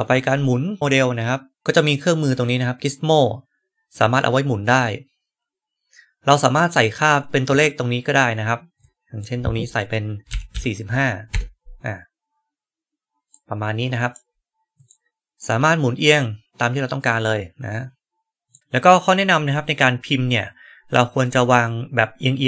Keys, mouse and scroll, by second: 3.9-6.4 right drag, 7.4 click, 8.7-9.1 drag, 13.2-14.0 right drag, 14.7 click, 15.3-18.4 right drag, 18.4 click, 18.6-22.4 right drag.